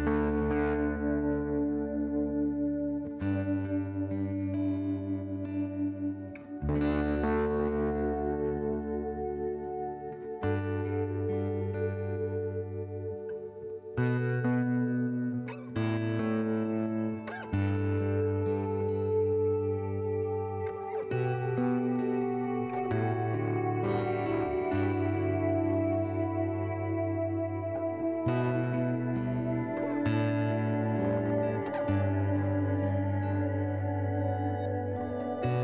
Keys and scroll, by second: 2.2 m, 35.3-35.6 typing.